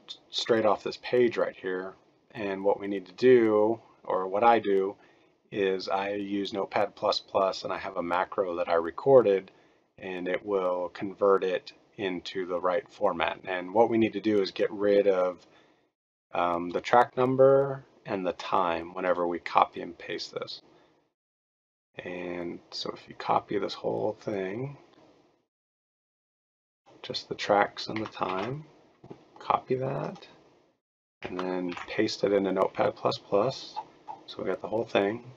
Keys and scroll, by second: 28.2 ctrl+c, 31.6 ctrl+v.